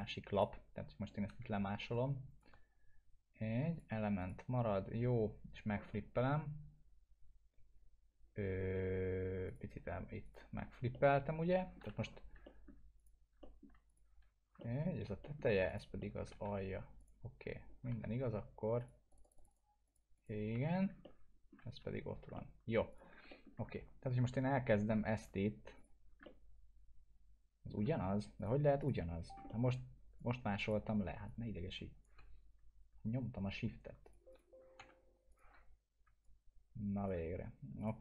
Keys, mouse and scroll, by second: 1.3 w, 1.9-2.5 shift+drag, 9.4 click, 10.9-11.8 alt+middle click, 12.0 F2, 12.4 alt+middle click, 13.0 click, 13.4 alt+middle click, 13.9 click, 14.6 middle click, 15.2 middle click, 15.7 click, 16.0 alt+middle click, 16.5 F2, 17.0 click, 18.1 F2, 18.8 click, 20.5 F2, 21.0-21.6 alt+middle click, 21.9 F2, 22.3-23.2 alt+middle click, 22.9 click, 23.3 alt+middle click, 25.1 1, 25.7 click, 25.8 click, 26.2-27.8 alt+middle drag, 28.1 scroll down 1, 28.4 click, 29.1 scroll down 1, 29.5 alt+middle click, 30.1-30.8 click, 31.2-32.2 shift+drag, 34.8 Escape, 35.3 click, 36.2-37.1 shift+drag.